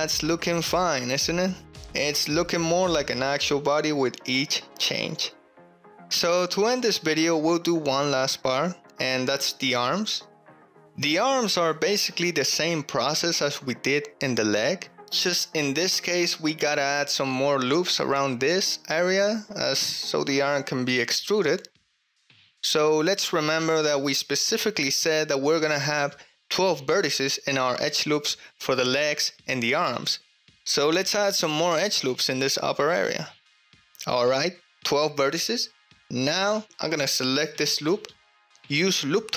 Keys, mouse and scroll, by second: 0.0 ctrl+middle click, 0.5 shift+middle drag, 1.1-1.5 middle drag, 2.0-2.5 shift+middle drag, 2.8 ctrl+middle drag, 2.8 ctrl+drag, 3.1 middle click, 3.6 shift+middle click, 3.6 shift+drag, 5.9-6.6 drag, 6.8 shift+click, 7.0 shift+middle click, 7.3 ctrl+middle click, 7.8 Tab, 8.6 shift+middle click, 8.8 click, 9.0 ctrl+middle click, 9.0 ctrl+click, 9.5 click, 9.5 middle click, 9.5 right click, 10.0 shift+click, 10.0 shift+middle click, 10.0 shift+right click, 10.3 ctrl+middle click, 10.4 ctrl+click, 10.4 ctrl+right click, 10.8 ctrl+z, 12.0 middle click, 12.0 click, 12.5 ctrl+click, 13.1 shift+middle click, 13.5 ctrl+middle click, 15.1 Tab, 18.3 middle click, 18.5 click, 18.6 ctrl+middle click, 18.9 shift+middle click, 19.2 ctrl+middle click, 19.7 middle click, 20.1 shift+middle drag, 20.4 ctrl+middle click, 21.6 middle click, 21.8 Tab, 22.1 3, 22.4 click, 30.7 x, 31.5 2, 31.9 ctrl+r, 32.8 ctrl+r, 33.1 click, 33.7 2, 35.7 middle click, 35.7 click, 35.9 middle click, 36.1 middle click, 36.1 click, 36.2 middle click, 36.6 click, 36.9 ctrl+middle click, 37.4-38.8 drag.